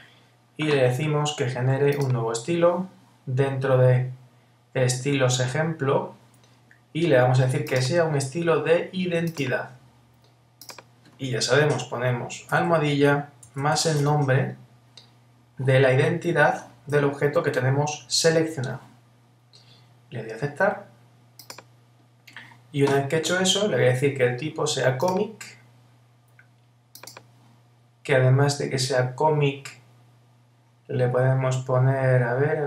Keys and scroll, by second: 12.5 alt+#.